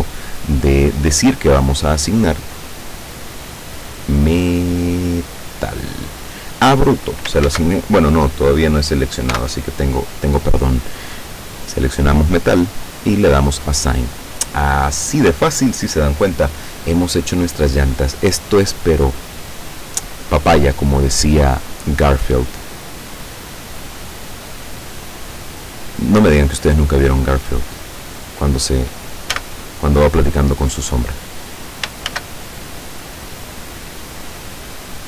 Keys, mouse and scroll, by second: 0.7-1.0 scroll up 2, 2.2 click, 5.5 click, 7.5 ctrl+z, 9.4 l, 11.7 click, 12.7 click, 24.8 click, 27.9-28.3 scroll up 2, 29.4 a, 32.1 shift+a, 33.4 click, 34.0-34.3 scroll down 2, 34.6-34.9 scroll down 2.